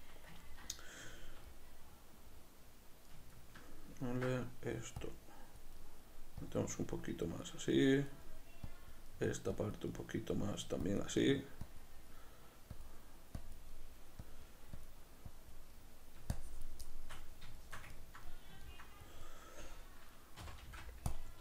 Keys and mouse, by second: 5.1 click, 5.9 middle click, 6.6 click, 6.9 middle click, 7.4 click, 7.7-8.8 middle drag, 8.8 click, 9.2 middle click, 9.6 click, 10.0-11.0 middle drag, 11.0 click, 11.3 middle click, 11.8 click, 12.2 middle click, 12.8-13.8 drag, 13.8 middle click, 14.3-15.8 drag, 15.8 middle click, 16.4 shift+click, 16.9-19.2 shift+middle drag, 19.2-21.2 drag, 20.5 c.